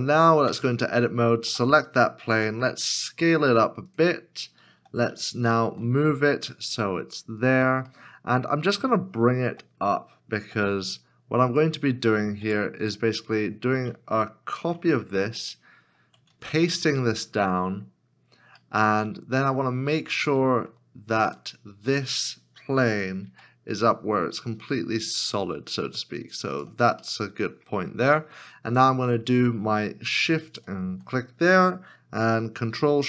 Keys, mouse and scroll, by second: 2.3 s, 4.7 s, 5.2 g, 5.5 shift+z, 7.9 middle click, 9.4 g, 10.4 z, 12.4 Tab, 14.5 ctrl+c, 16.5 ctrl+v, 18.6 ctrl+v, 18.8 middle click, 22.7 g, 27.0 z, 27.2 middle click, 30.5 shift+click.